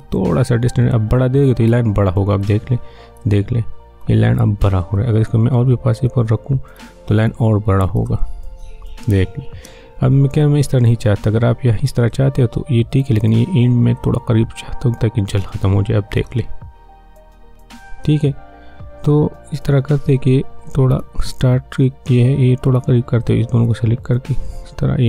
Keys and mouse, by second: 3.2 space, 6.0-8.1 drag, 8.1 space, 12.1-16.2 drag, 16.2 space, 20.7-25.0 drag.